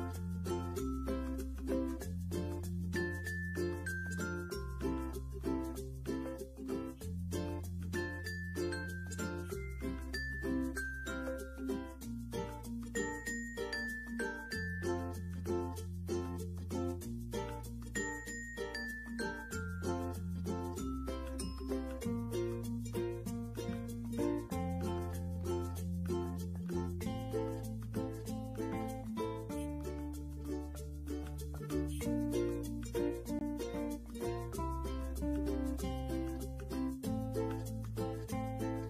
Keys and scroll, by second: 0.2-0.9 typing, 6.4 ctrl+g, 21.8 ctrl+g.